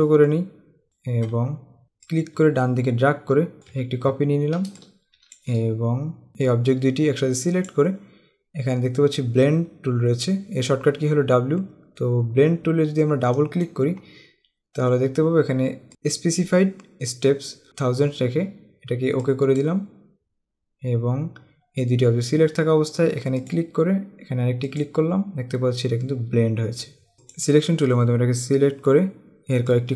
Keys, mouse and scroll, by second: 1.6 scroll up 1, 2.2 click, 4.2 scroll down 1, 4.8 space, 5.3 space, 6.3 click, 13.6 click, 15.9 click, 17.7 click, 19.4 click, 23.6 click, 24.8 click, 26.6 alt+scroll up 1, 27.3 click, 29.7 click.